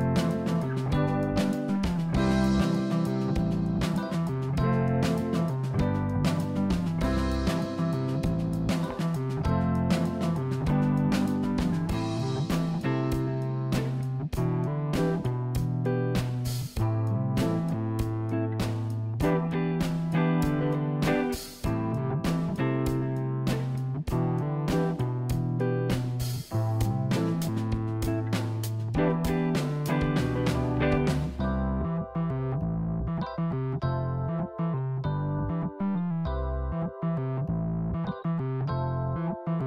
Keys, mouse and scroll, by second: 3.5-4.9 drag, 4.9-5.8 scroll down 15, 5.8 click, 7.6-9.2 drag, 9.8-11.5 scroll down 5, 14.3-15.4 scroll down 1, 15.4-16.4 scroll up 3, 16.4-17.5 scroll up 1, 17.5-18.7 drag, 18.7 KP_0, 19.3 click, 23.8 click, 28.1-28.7 scroll up 5, 28.7-30.5 drag, 32.1-34.1 drag, 37.7-39.5 scroll down 4, 39.6 click.